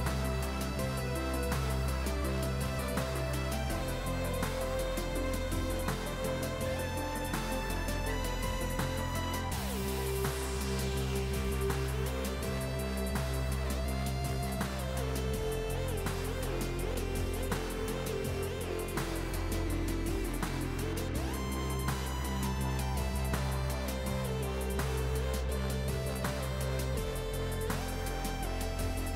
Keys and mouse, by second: 2.2 right click, 2.4 click, 2.6 right click, 2.8 click, 4.3 right click, 4.8 click, 6.8 Escape, 6.9 click, 15.6 ctrl+click, 16.6 Escape, 16.7 click, 22.7 Return, 22.9 ctrl+1, 23.0 click, 23.7 click.